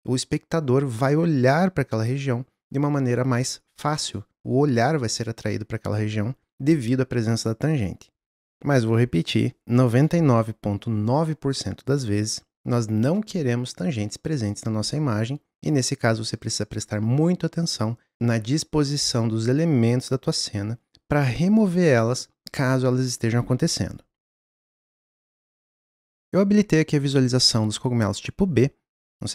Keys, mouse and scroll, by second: 26.1 click, 29.0 click.